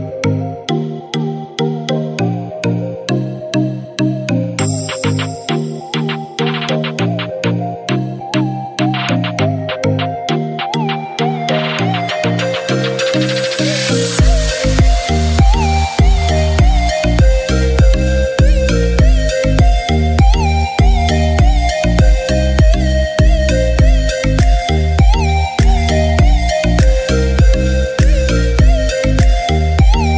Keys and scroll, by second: 2.3-3.4 typing, 4.5 typing, 8.0-9.0 typing, 11.2 typing, 14.3-15.1 typing, 16.9 typing, 18.5 typing, 21.9-25.4 typing, 26.9-27.3 typing.